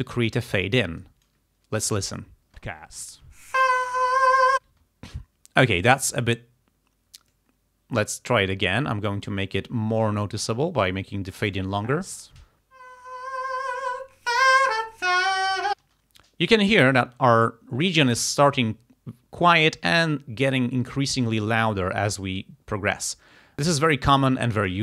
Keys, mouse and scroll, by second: 2.0 click, 2.6 space, 4.7 space, 5.7 click, 7.4-9.5 drag, 10.3 click, 11.5 click, 11.9 space, 15.8 space, 24.7 click.